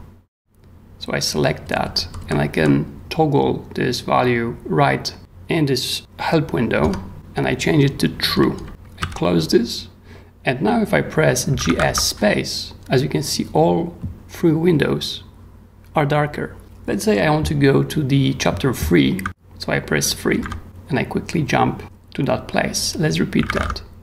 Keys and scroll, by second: 1.6 j, 6.8 Return, 8.3 k, 9.0 q, 11.3-12.1 typing, 20.4 3, 23.1-23.9 typing.